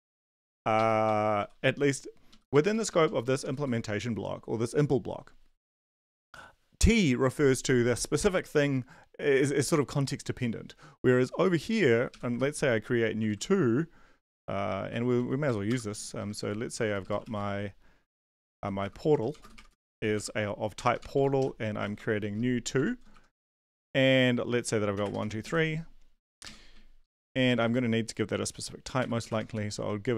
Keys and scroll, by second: 0.0-1.4 typing, 2.5 Right, 2.7 shift+Down, 2.9 shift+Down, 3.0 shift+Down, 3.5 shift+Left, 12.3 2, 12.6 Right, 13.2 ctrl+s, 15.0 Down, 15.2 Down, 15.4 End, 15.7 Return, 15.9 Tab, 16.2-23.6 typing, 24.8-27.5 typing, 29.0-29.8 typing.